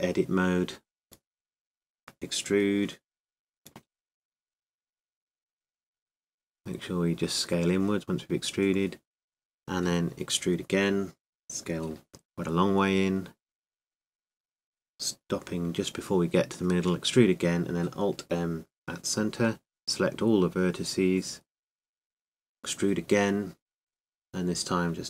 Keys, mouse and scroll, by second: 0.0 n, 0.0 t, 1.9 Tab, 4.9 e, 9.0 s, 10.5-12.4 drag, 12.2 e, 12.6-14.4 drag, 13.1 s, 16.2-19.1 drag, 17.0 e, 18.3 alt+m, 21.4 a, 22.2-23.7 middle drag, 24.1 e, 24.6-25.0 drag.